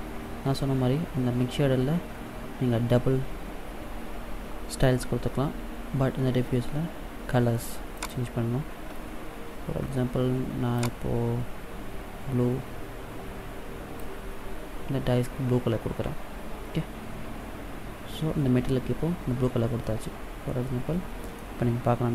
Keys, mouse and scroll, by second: 7.8 click, 19.7 middle click.